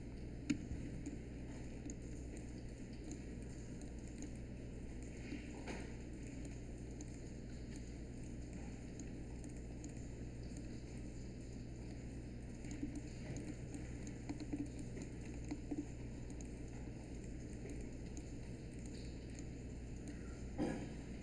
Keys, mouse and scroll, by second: 0.4 q, 5.3 w.